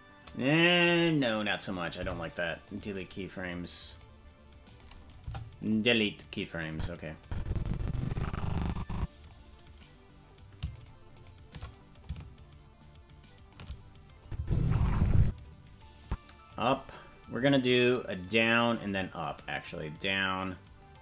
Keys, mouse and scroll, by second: 0.8-1.9 right drag, 1.9 Delete, 3.9-5.2 right drag, 5.2 Delete, 6.7 click, 7.2-9.3 drag, 10.8 shift+right click, 11.2 shift+right click, 12.0-13.5 shift+drag, 14.2 click, 14.4 space, 15.2 space, 16.0 click, 18.2 click, 19.6 click.